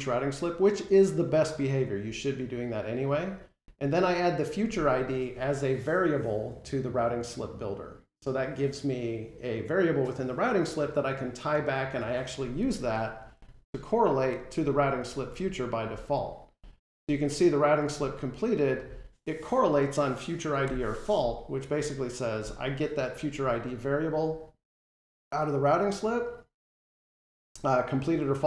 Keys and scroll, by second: 20.5 F12.